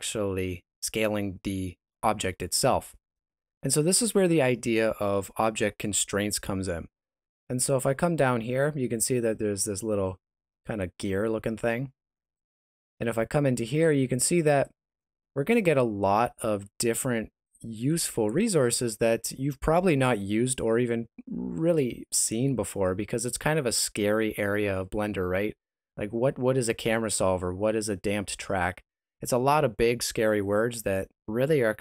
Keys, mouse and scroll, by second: 12.3 click, 14.4 click.